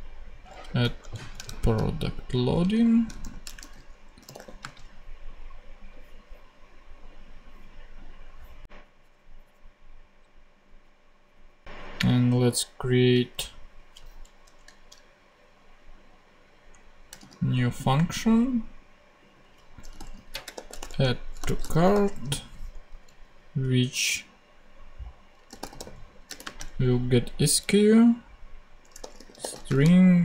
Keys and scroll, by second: 0.8 Right, 1.4 alt+shift+super+Left, 1.4 alt+shift+super+c, 2.3 shift+super+c, 2.5 super+v, 3.0 shift+super+v, 3.2 shift+super+l, 3.2-4.7 typing, 14.6 shift+super+Left, 14.8 shift+super+Down, 15.7 shift+Down, 16.6 shift+Down, 17.1 shift+super+d, 18.1 super+d, 19.6-22.2 typing, 22.6 alt+t, 22.8 alt+Right, 25.4-26.8 typing, 28.5-30.0 typing.